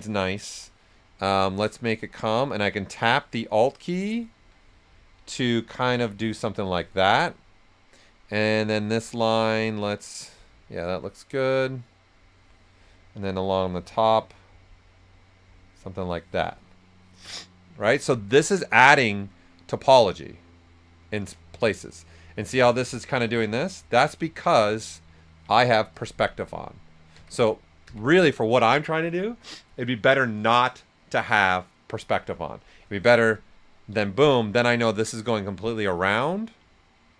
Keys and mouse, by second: 1.4-8.6 ctrl+shift+drag, 8.6-18.2 ctrl+shift+drag, 18.2 typing, 18.2 ctrl+right click, 19.5-21.6 right drag, 22.2 right click, 24.2 alt+right click, 25.9 click, 27.1 ctrl+z, 32.4 ctrl+z, 32.6 ctrl+shift+click, 33.3 ctrl+shift+space, 34.3-37.1 shift+right drag.